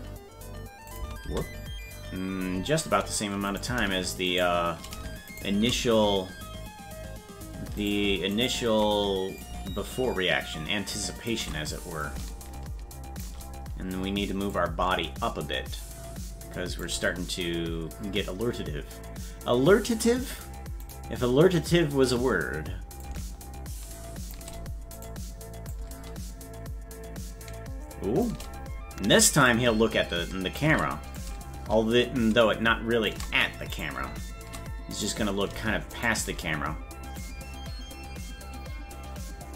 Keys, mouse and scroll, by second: 0.9 click, 1.0 space, 3.6 right click, 5.4 shift+right click, 7.9 right click, 8.5 shift+right click, 9.4-11.3 drag, 12.0-13.2 drag, 14.5-16.8 drag, 21.0 right click, 23.0-24.3 drag, 25.0 right click, 25.7-28.3 drag, 29.5-30.6 drag, 31.1-33.1 drag, 34.0 right click, 36.0 shift+right click, 37.2-39.5 drag.